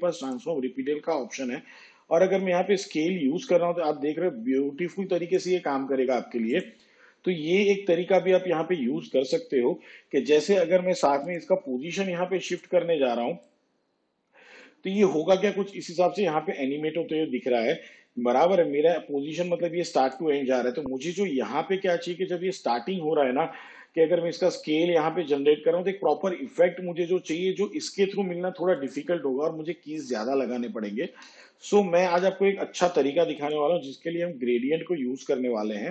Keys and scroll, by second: 31.0 ctrl+z.